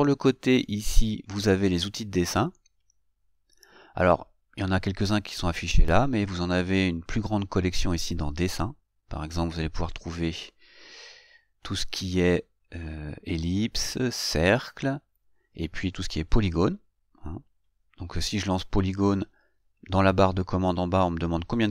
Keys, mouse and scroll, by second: 18.6 click.